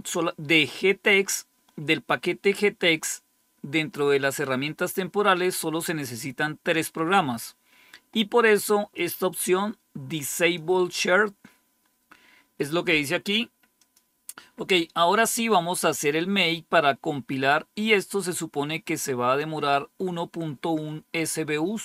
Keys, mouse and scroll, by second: 8.9-10.5 drag, 11.7-13.2 scroll down 2, 13.7 click, 15.6-21.5 scroll up 2.